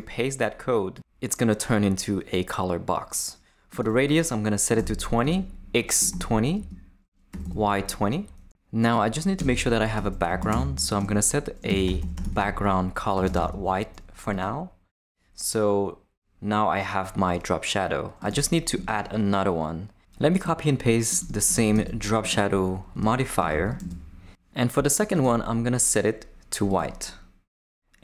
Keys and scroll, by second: 4.4-7.9 typing, 9.4 Return, 9.7-13.9 typing, 18.7 Tab, 21.7 shift+super+c, 22.3 super+c, 22.9 Return, 23.4 Tab, 23.8 super+v.